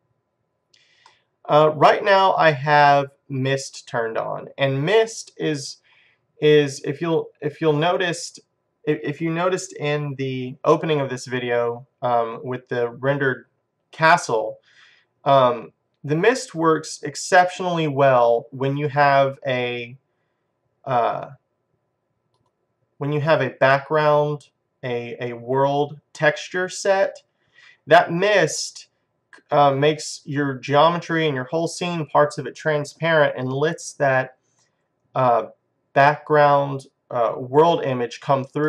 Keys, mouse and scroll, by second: 1.1-2.9 middle drag, 6.3 middle click, 6.9-8.1 scroll down 2, 8.1 middle click, 12.8-15.7 middle drag, 16.1-17.9 middle drag, 21.1-24.4 drag, 28.7-30.8 middle drag.